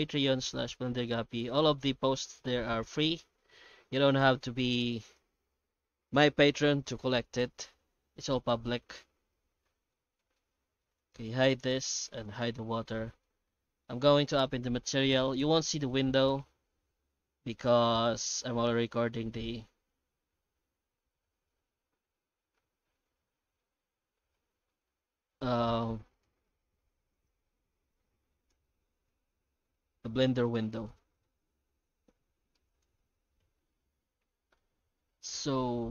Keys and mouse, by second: 1.8 right click, 2.8 shift+g, 4.2 g, 9.8 middle click, 10.3 shift+middle click, 11.4 h, 12.1 right click, 12.4 h, 12.8-13.2 middle drag, 13.6 shift+middle drag, 14.1 F4, 27.1 right click, 27.6 shift+g, 28.5 alt+shift+z, 29.1 alt+x.